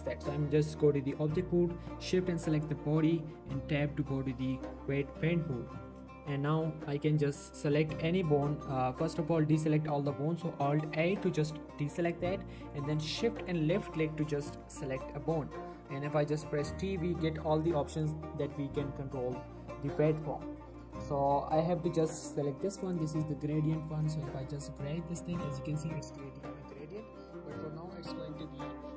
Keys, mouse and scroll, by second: 2.2 Tab, 2.5 shift+click, 3.1 Tab, 4.4 Tab, 5.2 Tab, 10.4 Tab, 10.9 alt+a, 11.7 scroll up 1, 12.0 shift+middle click, 13.4 shift+click, 14.6 shift+middle click, 16.7 t, 22.9-25.7 drag, 24.3-25.5 drag, 25.7-27.0 scroll down 2, 27.8 scroll up 1.